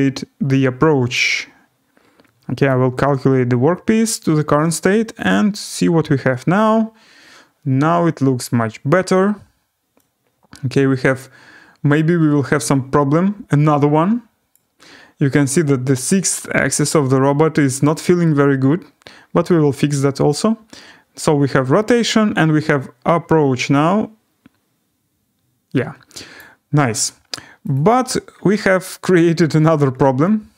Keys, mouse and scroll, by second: 2.6 click, 5.3 click, 14.5 click, 15.2-15.9 scroll, 16.5 middle click, 18.0-18.6 scroll, 26.3 click, 27.7 click, 28.3-30.5 scroll.